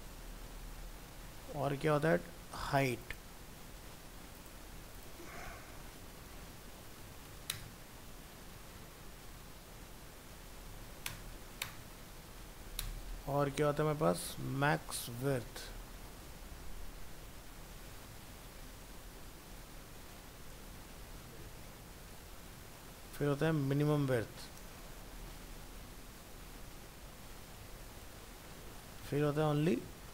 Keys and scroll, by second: 4.8 ctrl+c, 7.7 ctrl+v, 11.1 ctrl+BackSpace, 13.0 ctrl+v, 24.1 ctrl+c, 24.7 ctrl+Return, 24.8 ctrl+v.